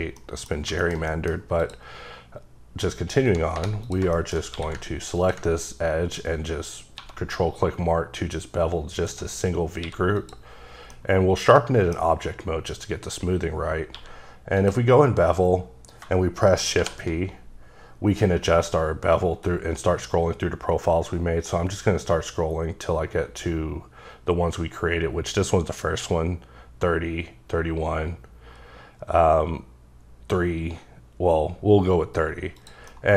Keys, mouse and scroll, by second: 0.2 middle click, 0.6 scroll down 2, 0.8 shift+middle click, 1.6 click, 3.1 scroll up 2, 3.5 3, 3.8 click, 4.1 shift+middle click, 4.5 q, 5.2 ctrl+click, 6.0-7.0 scroll up 10, 7.0 1, 7.4-9.0 scroll up 4, 9.0 click, 9.4-9.8 scroll up 2, 9.8 q, 10.1 click, 10.9 middle click, 12.0 scroll up 1, 13.9 q, 14.6 click, 16.8 shift+p, 18.7-19.4 scroll down 1, 19.4-19.7 scroll down 1, 19.7-23.9 scroll up 20, 23.9 scroll down 2, 26.5-26.9 scroll up 1, 27.5-28.5 scroll up 1, 28.5-29.9 scroll down 3, 29.9-32.1 scroll up 1, 32.9 scroll down 1.